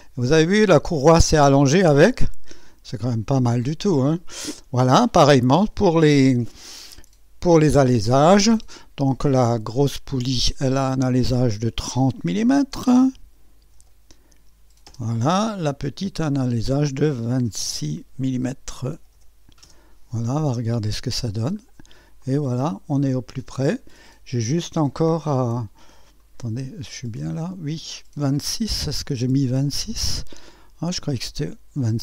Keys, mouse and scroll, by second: 2.1-4.6 drag, 3.5 typing, 4.8-5.9 typing, 6.1 click, 9.7 click, 12.5-14.1 typing, 14.9 Return, 16.2 click, 16.4-19.6 typing, 16.7 click, 17.0 click, 20.9 click, 21.6 scroll up 1, 21.7-29.5 typing, 22.2-24.5 drag, 24.7-25.1 scroll up 2, 25.4-26.5 drag, 26.2 right click, 26.5 middle click, 26.6 click, 26.6 right click, 29.0 click.